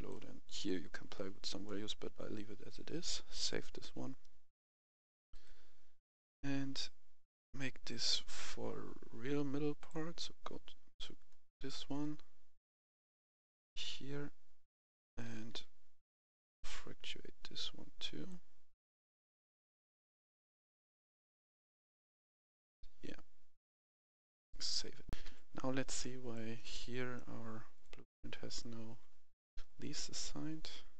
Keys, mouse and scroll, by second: 1.1-1.6 scroll down 1, 1.6-3.2 scroll up 1, 3.2 click, 7.0-7.8 scroll up 1, 7.8 click, 8.1 right click, 9.6 click, 11.3-11.7 scroll down 1, 12.5 click, 13.5-16.5 right drag, 13.7-15.8 typing, 18.2-25.0 drag, 25.0 F11, 25.3 F10, 25.9 right click, 27.6 click, 28.0 right click.